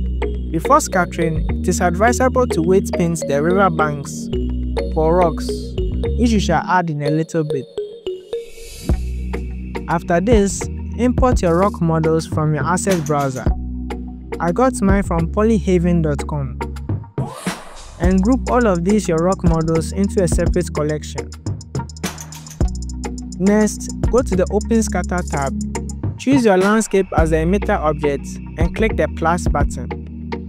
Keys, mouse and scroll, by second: 0.2 click, 0.3 scroll up 3, 0.4-0.8 drag, 1.1-2.1 drag, 2.7 click, 2.9 KP_7, 3.0-3.3 scroll up 4, 3.3 click, 3.7 click, 4.5 click, 4.7 click, 6.0-7.2 drag, 7.5 click, 7.8-9.4 drag, 9.7 click, 10.3 scroll down 5, 10.5-10.9 scroll up 2, 10.8 click, 11.3 click, 12.4 click, 13.6 click, 15.0 click, 15.8 click, 15.9-17.0 scroll down 17, 17.5 shift+click, 18.1 click, 18.7 click, 19.7 click, 19.8 click, 20.4 click, 20.9 click, 20.9 click, 21.0 click, 21.9 click, 21.9 click, 22.1 shift+click, 22.4 n, 22.8-25.7 scroll down 13, 25.7 click, 27.0 click, 28.1 click, 29.9-30.4 drag.